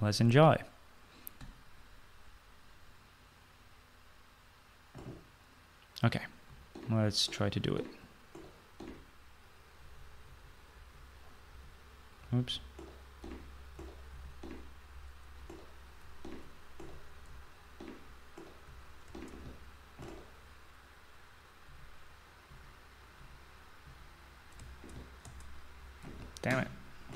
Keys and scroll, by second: 6.4-14.8 typing, 16.5-19.0 typing, 21.6-27.1 typing.